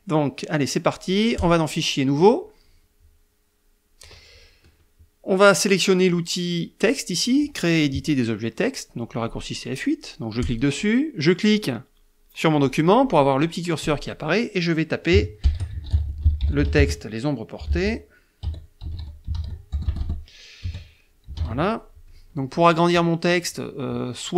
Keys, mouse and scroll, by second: 1.7 click, 2.5 click, 10.7 click, 13.0 click, 15.5-20.2 typing, 21.3-22.2 typing.